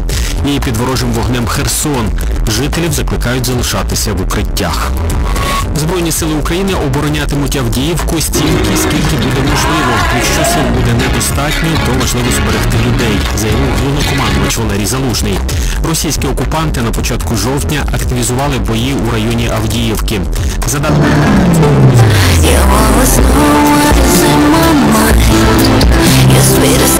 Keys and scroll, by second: 2.4 Page_Down, 14.6 Page_Down.